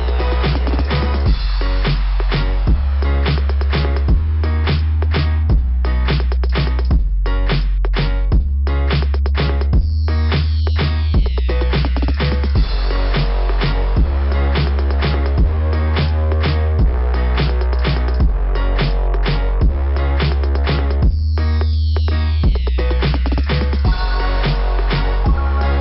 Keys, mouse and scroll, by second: 2.0 click, 2.1 click, 2.9 click, 7.7 click, 7.8 click, 9.8 click, 9.9 click, 10.7 click, 12.1 click, 13.9 click, 14.0 click, 17.1 scroll down 2, 18.5 click, 18.7 click, 22.4-23.1 scroll up 1, 23.1 scroll up 1, 23.6 scroll up 1, 24.6 click.